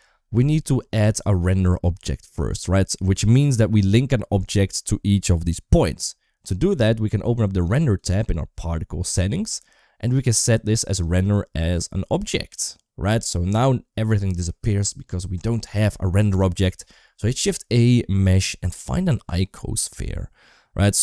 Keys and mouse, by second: 3.4 click, 7.7 click, 10.9-12.0 drag, 17.3 shift+a.